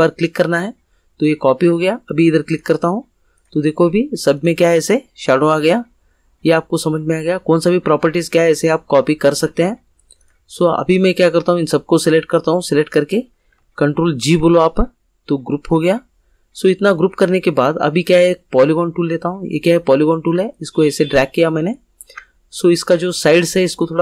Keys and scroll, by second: 14.2 ctrl+g.